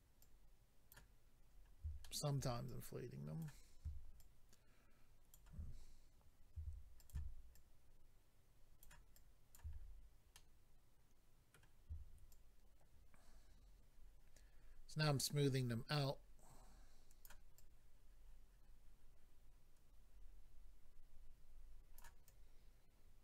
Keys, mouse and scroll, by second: 0.2 click, 1.5-2.0 scroll up 2, 2.0 shift+middle click, 2.6 click, 4.2 ctrl+click, 6.5 f, 7.0 click, 7.1 click, 7.5 ctrl+click, 9.1 ctrl+click, 9.7-10.3 scroll down 3, 10.3 middle click, 10.3-10.7 scroll down 1, 12.3 shift+click, 17.6 shift+click, 22.3 shift+click.